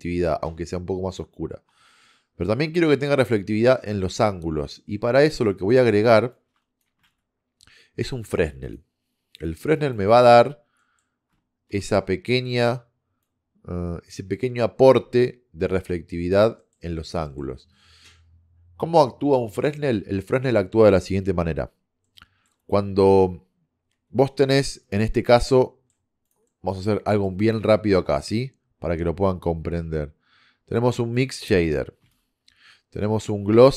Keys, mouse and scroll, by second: 6.4 click, 7.1 shift+a, 12.3-15.3 drag, 16.2 click, 23.8 KP_1, 26.5 middle click, 27.7 shift+a, 32.1 shift+a.